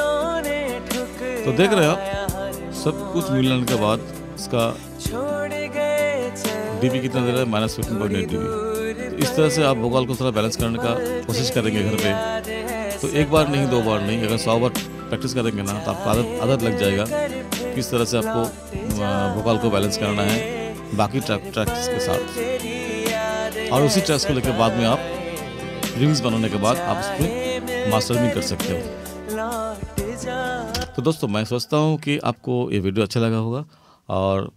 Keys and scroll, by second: 30.8 space.